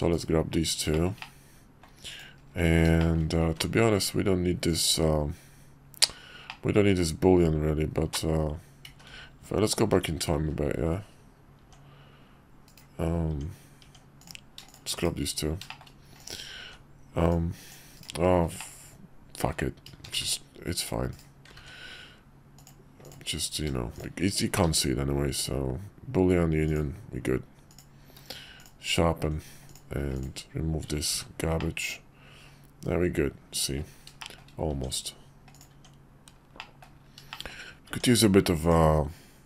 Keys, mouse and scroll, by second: 0.1 /, 0.9 shift+middle drag, 1.2-1.8 middle drag, 2.1 click, 3.0 shift+click, 3.5 ctrl+`, 6.5-8.0 drag, 8.9 ctrl+z, 11.1 ctrl+z, 12.7 ctrl+z, 12.7 Tab, 12.7 drag, 14.2 click, 14.9 /, 15.7 shift+middle click, 16.6 ctrl+`, 18.6-19.4 middle drag, 20.2 ctrl+`, 21.7 ctrl+`, 24.5 q, 27.7 click, 28.0 q, 29.7 click, 30.1 click, 31.1 h, 31.6-33.7 drag, 34.2 shift+click, 34.7 Tab, 35.5 click, 36.6 click, 37.3 shift+click, 38.6 click.